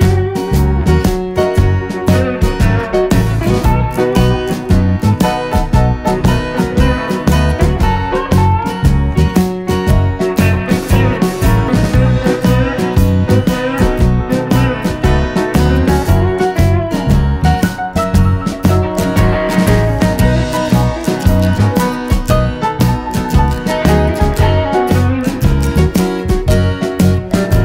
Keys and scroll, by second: 4.4 super+d, 11.5 super+c, 11.6 super+v, 17.5 super+d.